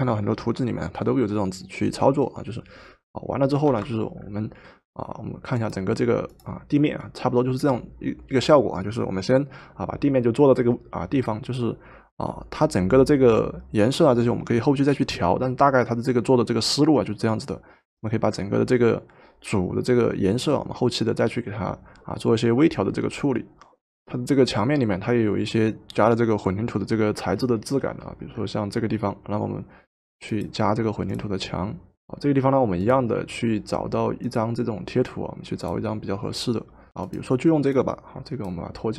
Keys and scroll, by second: 3.6 v.